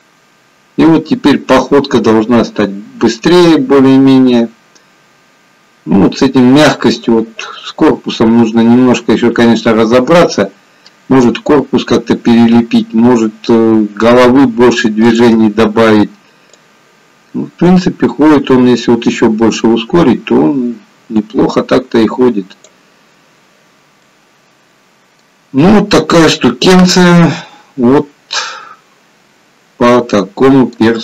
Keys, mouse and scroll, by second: 15.4 click, 16.8 click, 24.1 middle click, 25.6-26.0 scroll up 1, 26.0 middle click.